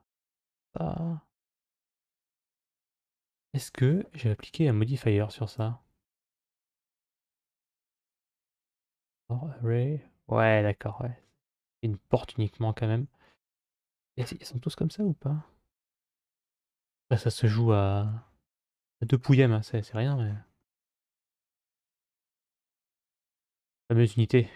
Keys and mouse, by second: 7.2 click, 11.0-13.6 middle drag, 14.4 KP_3, 17.5-22.6 shift+middle drag, 23.2 middle click.